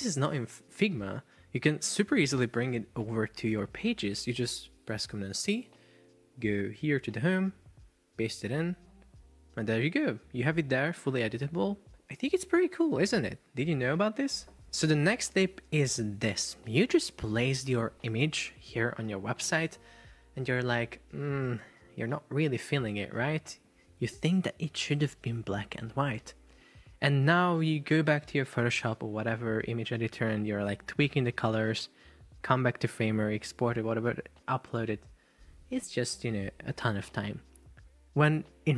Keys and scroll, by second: 6.0 super+c, 8.6 super+v, 19.4 Caps_Lock.